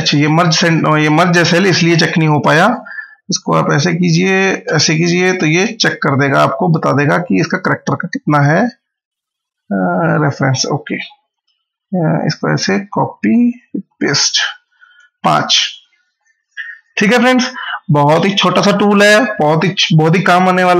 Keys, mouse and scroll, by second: 3.2 ctrl+x, 3.9 click, 4.5 ctrl+v, 6.9 click, 12.0 Up, 13.2 ctrl+c, 13.4 Down, 13.8 ctrl+v, 14.5 Down.